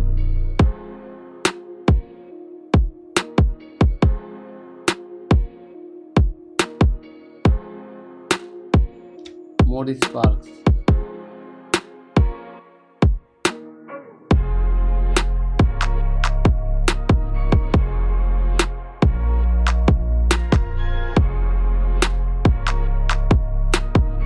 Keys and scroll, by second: 0.6 Return, 1.3 ctrl+b, 2.3 ctrl+u, 4.3 Return, 5.9 ctrl+t, 7.5 Return, 8.3 space, 9.6 Return, 10.5 ctrl+m, 11.4 Return, 11.7 ctrl+u, 12.7 Return, 13.5 ctrl+t, 14.8 Return, 16.3 [, 17.1 v, 17.6 space, 18.3 ctrl+s, 19.4 F2, 20.6 Return, 22.0 v, 22.2 space, 23.8 space.